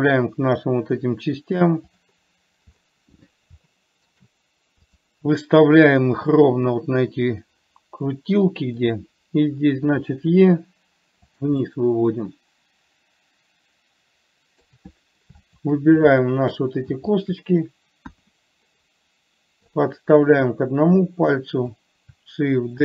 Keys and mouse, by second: 4.0 shift+middle click, 5.2 click, 6.4 g, 10.3 e, 11.9-15.0 middle drag, 15.8 shift+click, 16.5 shift+click, 18.4 KP_1, 20.2-22.0 drag.